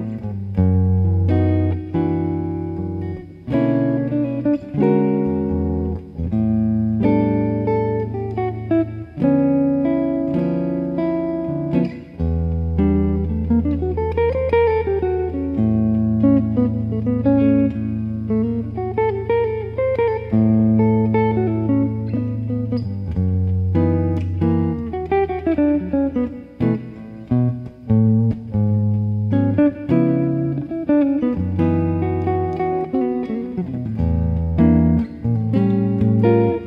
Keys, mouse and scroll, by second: 0.1 right click, 0.7-5.2 middle drag, 4.0 x, 5.7-7.9 middle drag, 7.9 click, 9.0 right click, 10.4 KP_1, 11.2-12.3 middle drag, 12.3 KP_3, 15.1 z, 17.4 KP_3, 18.7 e, 19.8 click, 21.7-25.4 middle drag, 25.4 z, 27.4 click, 28.5 middle click, 29.1-30.4 middle drag, 30.8-34.0 middle drag, 34.0 KP_1, 35.9 click.